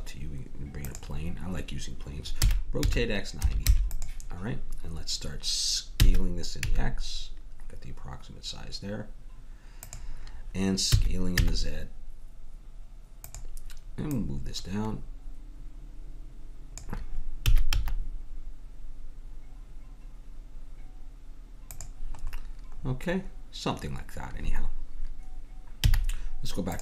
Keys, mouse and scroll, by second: 2.4 r, 6.1 s, 11.0 s, 14.1-16.0 drag, 17.4 s, 22.9-23.9 middle drag, 25.8 z.